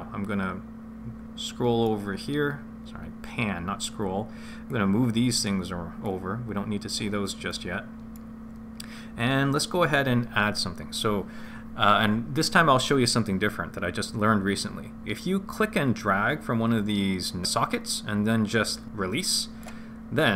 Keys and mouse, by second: 4.6 click, 6.0 click, 7.4 middle click, 15.6 click.